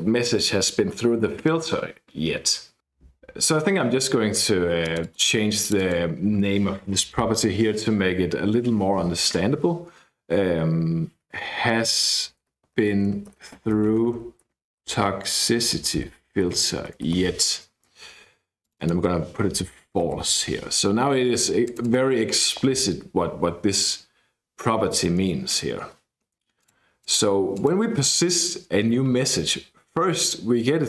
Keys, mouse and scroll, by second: 2.8-3.4 scroll up 1, 4.8 click, 5.6 click, 11.4-17.6 typing, 18.6 click, 19.2-20.8 typing, 21.6 click, 25.4-26.4 scroll down 1, 26.6 click, 27.5 click, 28.0-29.0 scroll up 1.